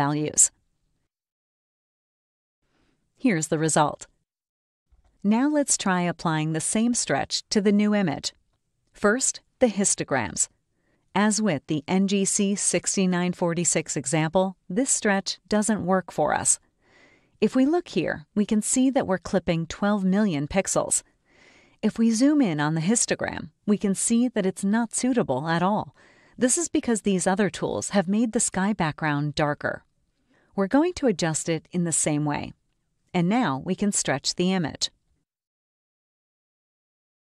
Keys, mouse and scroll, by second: 3.8 click, 6.9 click, 12.4 click, 13.4 click, 15.9 click, 23.0 0, 34.9 click.